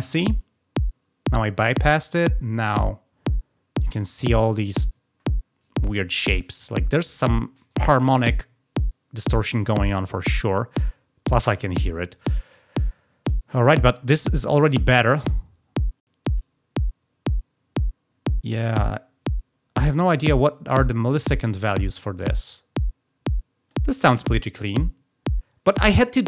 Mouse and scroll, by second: 2.6 click, 14.6-23.6 drag.